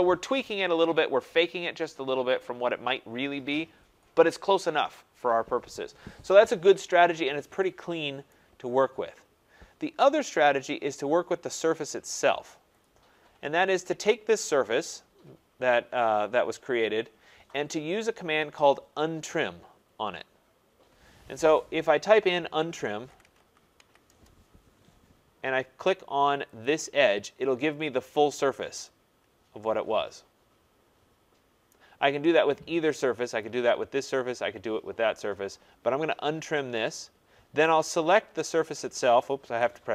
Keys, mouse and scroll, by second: 6.7 scroll down 3, 7.6 scroll, 8.2 right click, 9.0 scroll, 9.7-11.1 scroll, 11.5 scroll, 12.8 click, 15.5-16.1 scroll, 17.7 scroll, 19.3 scroll, 19.5 middle click, 22.3-24.2 typing, 24.3 scroll, 26.6 click, 27.4 scroll, 28.2 scroll, 29.2 middle click, 31.7 right click, 33.5 click, 39.4 Return.